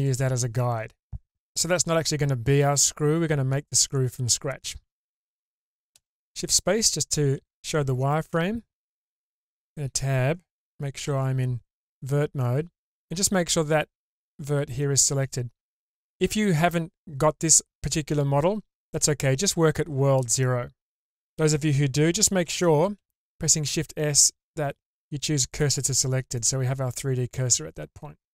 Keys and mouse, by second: 0.0-1.8 middle drag, 5.9 shift+space, 9.2 Tab, 11.0 1, 12.4 click, 12.5 middle click, 23.0 shift+s, 26.3-28.3 middle drag.